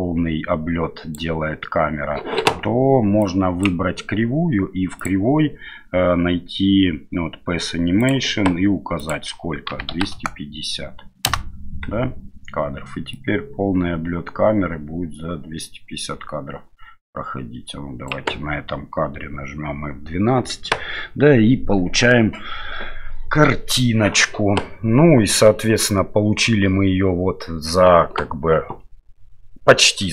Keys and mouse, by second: 3.2 click, 5.0 click, 8.0 click, 9.0-11.5 drag, 13.1-18.1 drag, 19.4 F12.